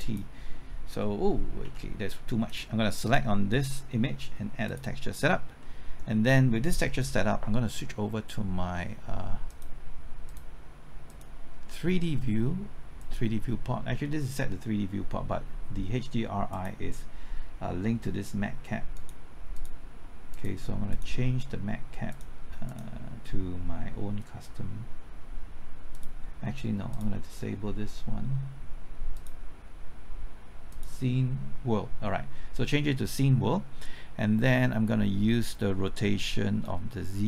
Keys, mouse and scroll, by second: 1.6 ctrl+z, 2.5 click, 5.6-6.9 middle drag, 9.5-27.9 drag, 27.9-37.2 drag.